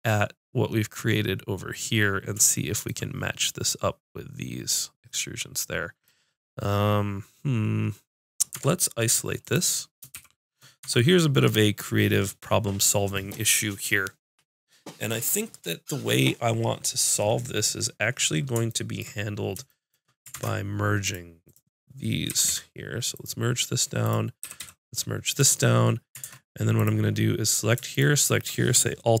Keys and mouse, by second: 1.9 middle click, 8.6 Tab, 9.4 click, 10.1 shift+h, 10.8 Tab, 15.6-18.1 middle drag, 18.2 middle click, 20.4 ctrl+Tab, 21.5 click, 22.3 g, 24.0 click, 24.4 g, 25.8 click, 26.2 ctrl+Tab, 26.2-27.5 middle drag, 27.5-29.2 drag.